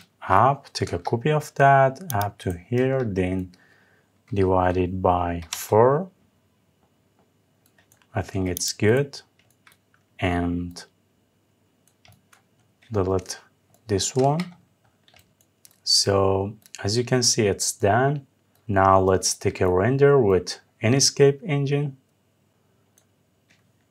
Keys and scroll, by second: 0.5 Up, 5.2 Return, 13.8 Delete.